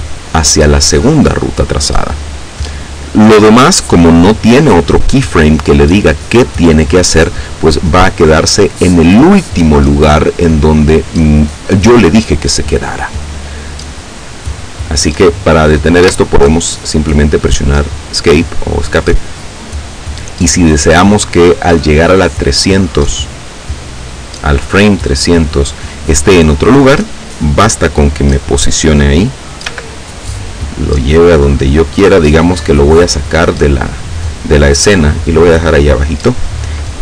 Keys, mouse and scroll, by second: 16.0 Escape, 18.5 click, 22.0-24.2 drag, 29.3 g, 35.2-35.7 drag.